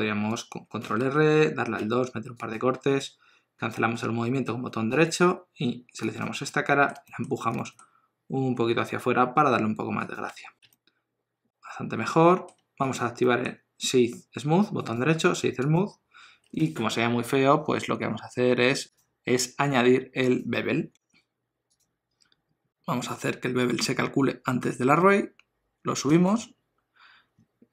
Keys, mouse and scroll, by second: 0.8 ctrl+r, 5.6 3, 6.0 click, 6.5 middle click, 7.1 shift+middle click, 7.5 g, 10.3 Tab, 10.6 alt+a, 10.7 middle click, 12.9 click, 13.2 middle click, 14.8 right click, 18.9 click, 26.1 click.